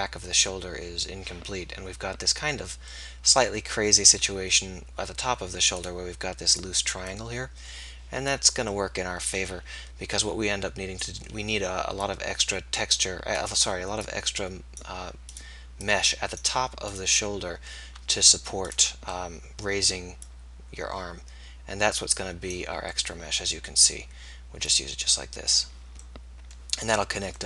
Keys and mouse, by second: 10.1 middle click, 12.2-19.4 middle drag, 19.4 right click, 19.6 click, 20.3-22.0 middle drag, 23.5-26.3 middle drag.